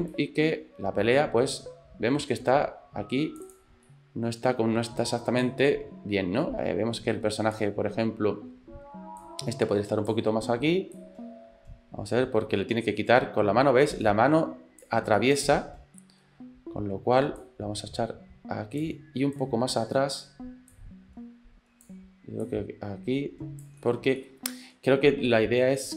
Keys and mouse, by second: 0.2-3.5 drag, 3.9 middle click, 5.5-7.8 drag, 9.2 click, 11.0-15.0 drag, 15.2 middle click, 16.0 middle click, 17.4-18.9 drag, 19.4 click, 20.7-21.9 drag, 22.5-23.7 drag, 23.8 middle click, 24.2 shift+middle click.